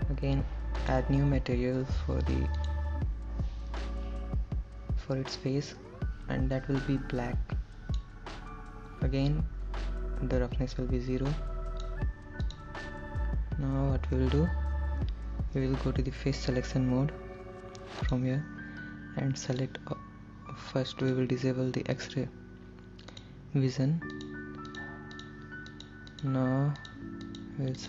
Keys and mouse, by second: 1.2 click, 2.8 click, 11.6 click, 12.7 click, 18.3 click, 22.2 click, 24.5 shift+click, 25.0 shift+click, 25.4 shift+click, 26.0 shift+click, 26.4 shift+click, 27.5 shift+click.